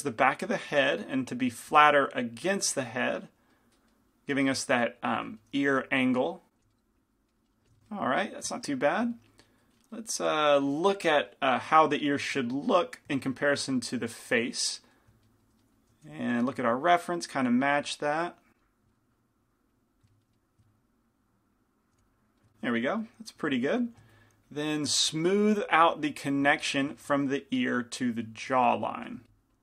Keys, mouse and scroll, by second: 3.7-5.3 middle drag, 5.9 f, 6.4-7.4 drag, 6.6 f, 7.5-15.1 drag, 7.7 f, 16.1 f, 17.3-20.4 drag, 20.4 middle click, 21.1-22.4 drag, 22.0 f, 25.8-28.7 drag, 27.1-28.8 middle drag, 28.9 middle click, 29.3-29.6 drag, 29.3 middle click.